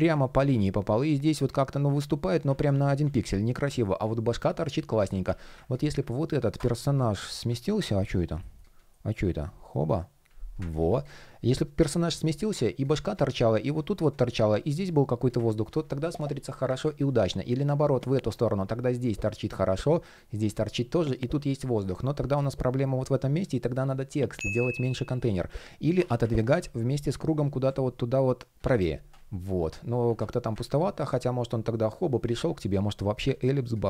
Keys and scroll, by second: 0.0 super+z, 2.3 super+z, 3.3 shift+p, 4.6 super+z, 7.2 super+z, 7.8 shift+Return, 9.4 alt+super+b, 11.7 shift+p, 15.3 super+z, 17.9 shift+p, 25.0 super+z.